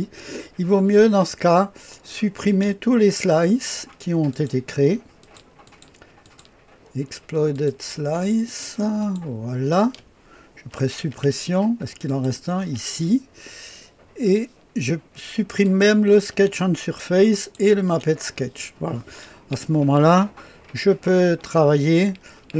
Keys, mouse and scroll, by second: 1.9 click, 4.3 ctrl+click, 5.2-9.9 ctrl+drag, 11.0 Delete, 12.0 click, 12.5 Delete, 15.6 click, 16.5 Delete, 17.5 click, 17.9 Delete, 19.9-22.0 drag.